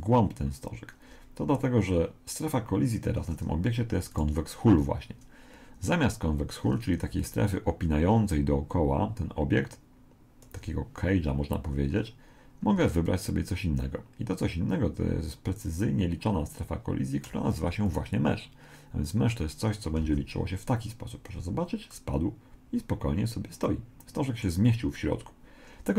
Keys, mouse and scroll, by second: 2.9 Escape, 4.1 right click, 7.1-13.1 d, 7.2 click, 13.1 right click, 17.3 d, 17.9 click, 20.0 alt+a, 21.9-23.8 middle drag.